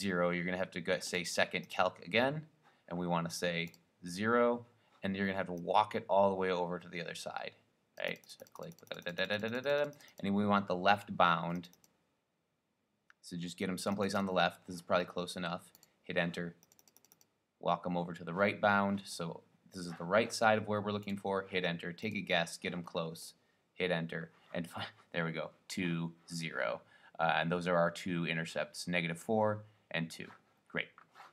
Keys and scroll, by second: 3.9 2, 8.1 Right, 8.2 Right, 8.4 Right, 8.6 Right, 8.7 Right, 8.9 Right, 9.0 Right, 9.5 Right, 9.7 Right, 9.8 Right, 10.0 Right, 10.3 Right, 11.7 Right, 12.1 Right, 14.2 Right, 14.3 Right, 14.5 Right, 15.9 Return, 16.8 Right, 17.1 Right, 17.3 Right, 21.2 Return, 22.2 Left, 23.6 Return.